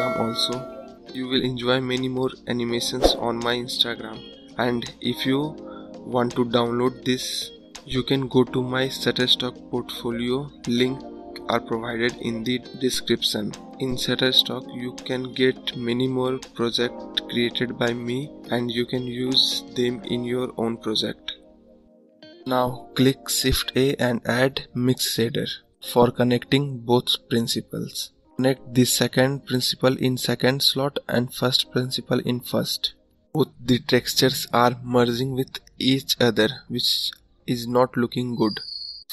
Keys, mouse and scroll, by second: 2.8-6.1 drag, 6.1-8.2 scroll up 6, 8.2-8.9 scroll up 1, 8.9-14.0 middle drag, 14.0 `, 14.3-14.7 scroll up 4, 28.3 scroll up 1, 31.7-35.4 drag, 38.3-39.1 scroll down 9.